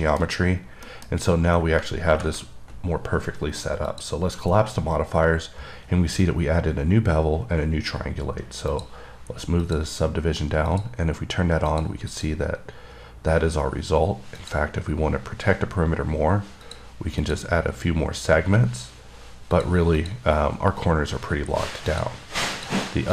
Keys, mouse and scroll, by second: 0.3 middle click, 0.8 scroll down 2, 1.1 middle click, 4.2 click, 9.0 click, 9.9 click, 11.0 click, 12.0 click, 12.4 click, 14.7 click, 16.9 click, 17.5 click, 19.8 click, 22.2 click, 22.8 click.